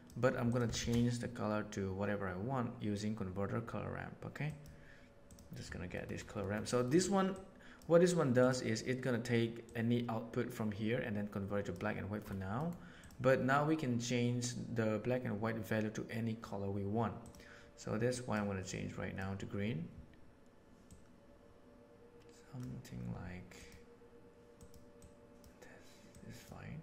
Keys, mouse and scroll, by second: 0.7 shift+a, 6.3 middle click, 6.8 middle click, 7.4 click, 8.3 click, 9.6-11.6 drag, 12.6 middle drag, 12.9 click, 17.2 click.